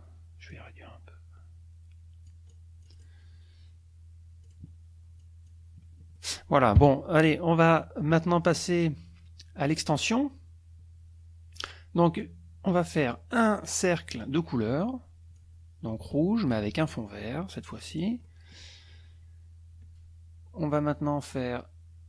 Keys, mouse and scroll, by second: 0.5-3.2 drag, 4.4 click, 5.2 click, 6.1 click, 6.8 KP_Subtract, 7.5 click, 14.1 click, 14.5 click, 15.4-16.7 drag, 17.9 click, 18.2 click.